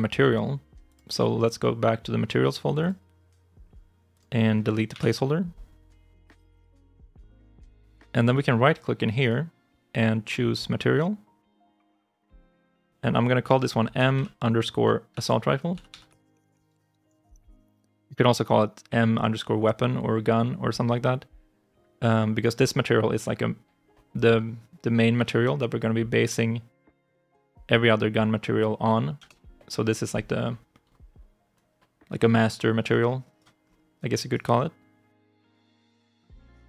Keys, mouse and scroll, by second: 2.6 double click, 4.8 Delete, 9.1 right click, 13.6-17.8 typing, 26.7 Return, 29.0 Return, 32.7 right click, 33.5-33.8 scroll up 1, 33.8 right click.